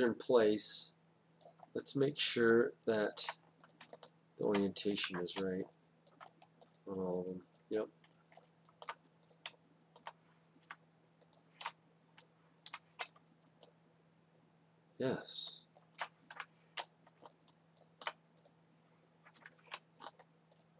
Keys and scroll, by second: 6.0 F8, 11.6 F8, 13.8 F8, 17.3 F8, 20.4 F8.